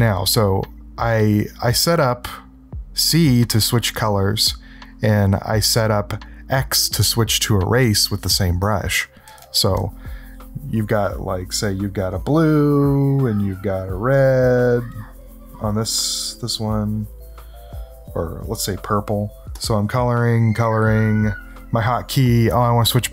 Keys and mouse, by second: 11.4 click, 13.1 click, 13.6 click, 13.9-15.0 drag, 15.5 click, 16.6 click, 17.3-18.9 drag, 19.5-22.1 drag.